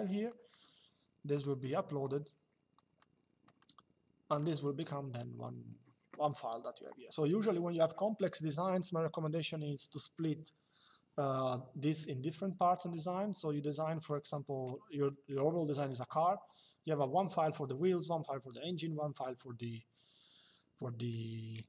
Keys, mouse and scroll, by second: 0.0 click, 1.1 click, 2.4 click.